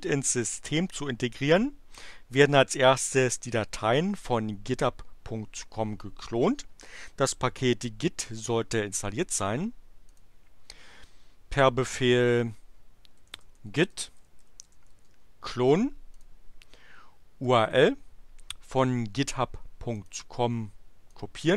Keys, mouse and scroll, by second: 10.2 click, 12.9-15.2 typing, 16.1 click, 17.4 click, 20.0 right click, 21.1 click.